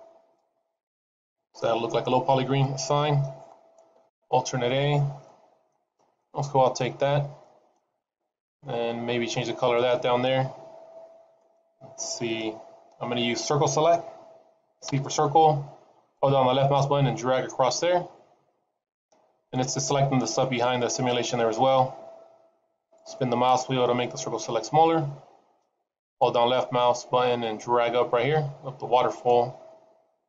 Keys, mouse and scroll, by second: 2.5 click, 4.1 alt+a, 4.8 scroll down 2, 5.1 middle click, 5.7-6.1 scroll up 2, 6.1 middle click, 9.3 middle click, 10.8-11.2 scroll down 3, 11.2 middle click, 12.9 scroll up 2, 14.8 c.